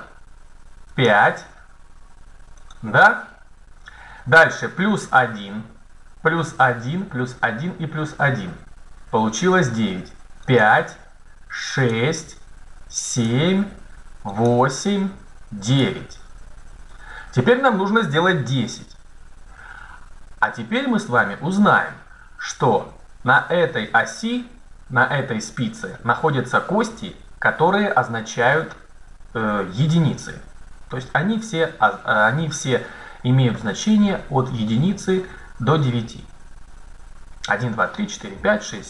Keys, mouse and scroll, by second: 0.8 click, 10.3-12.7 drag.